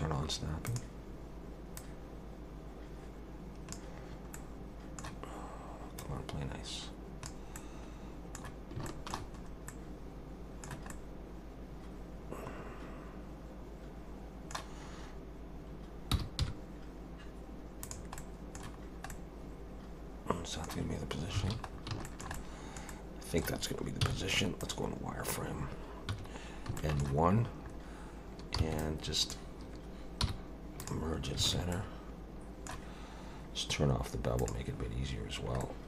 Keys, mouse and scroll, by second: 0.7 click, 1.8 click, 4.3 middle click, 6.0 click, 7.6 middle click, 8.9 shift+middle click, 9.4 scroll up 2, 9.7 middle click, 10.9 middle click, 11.1 shift+middle click, 16.1 g, 18.2 middle click, 18.8-19.1 scroll down 2, 19.1 middle click, 21.4 alt+a, 21.7 scroll down 2, 22.0 shift+middle click, 22.3 middle click, 22.9 middle click, 23.1 shift+middle click, 24.0 z, 25.0 scroll up 2, 26.1 1, 26.8 shift+middle click, 27.6-28.6 scroll up 2, 28.6 b, 30.2 m, 31.5 alt+a, 31.7 middle click, 34.4 click, 35.6 middle click.